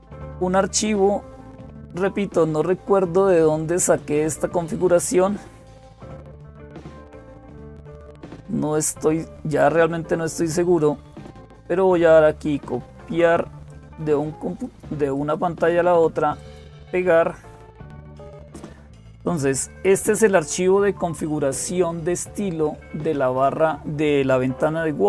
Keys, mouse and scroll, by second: 0.0-25.0 typing, 2.3-3.8 scroll up 1, 3.8-11.8 drag, 12.2-13.5 right drag, 13.5-15.5 drag, 15.0 middle click, 15.0-16.0 right drag, 16.2 click, 17.9 Home, 18.6-21.3 Up.